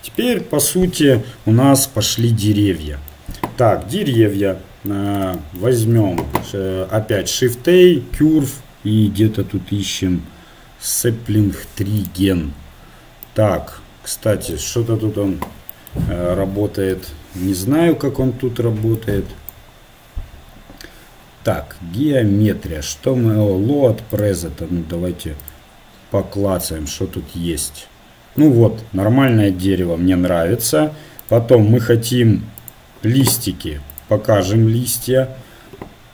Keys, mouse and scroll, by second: 1.8-2.2 scroll up 1, 2.2-6.6 middle drag, 6.6 click, 7.2 shift+a, 25.6-36.1 drag.